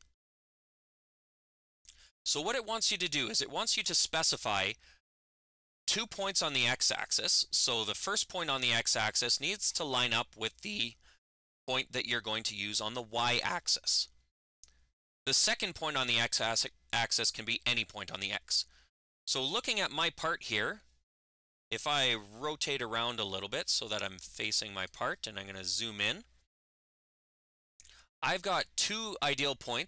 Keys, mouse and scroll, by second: 22.5-24.7 ctrl+shift+drag, 22.5-24.7 ctrl+shift+middle drag, 25.3 middle click.